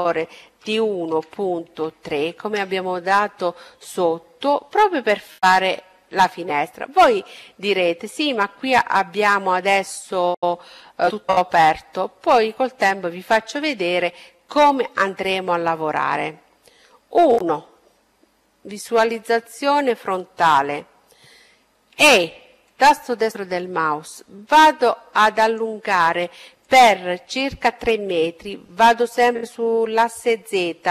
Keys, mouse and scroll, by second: 4.1-6.2 middle drag, 8.0-10.1 middle drag, 12.8-14.6 middle drag, 14.9 KP_1, 19.7 e, 22.0-24.0 drag, 24.6-26.4 drag.